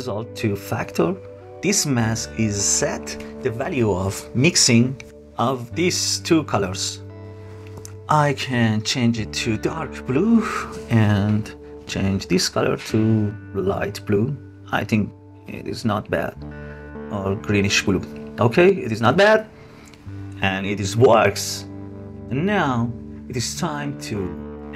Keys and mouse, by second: 6.4 click, 17.3-17.7 drag, 18.6 space, 19.6-20.4 drag.